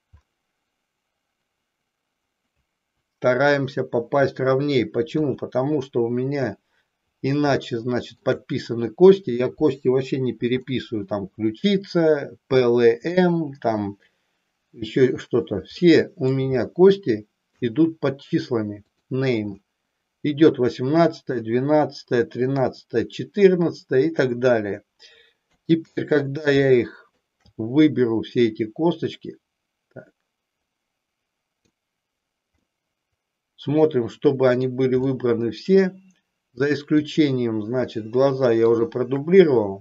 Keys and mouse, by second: 5.2 KP_1, 7.6 shift+middle click, 10.6 middle click, 15.8 middle click, 16.5-17.6 shift+middle drag, 18.9 click, 25.5 KP_1, 26.7 shift+middle click, 28.4-31.8 drag, 32.6-34.7 middle drag, 35.1 shift+middle click, 37.0 shift+click, 38.6 shift+click.